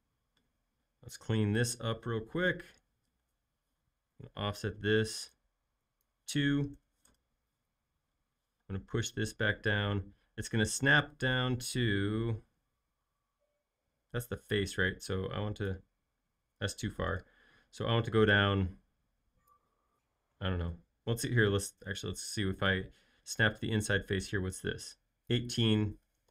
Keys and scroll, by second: 0.5 l, 3.2 space, 4.1 f, 6.7 2, 7.0 Return, 8.5 p, 17.1 super+z, 21.8 super+z, 26.0-26.3 typing.